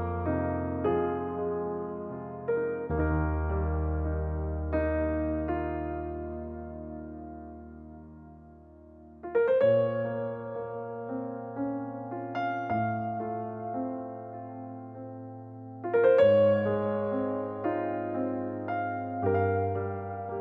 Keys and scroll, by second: 0.8 typing, 3.4 alt+r, 11.6-12.6 typing, 14.8 typing, 18.1-18.9 typing.